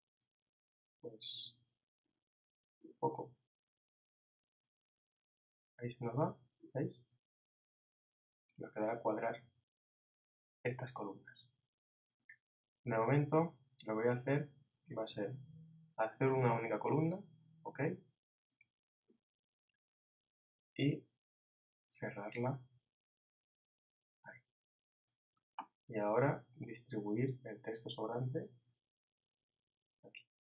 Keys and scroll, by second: 15.4 super+b.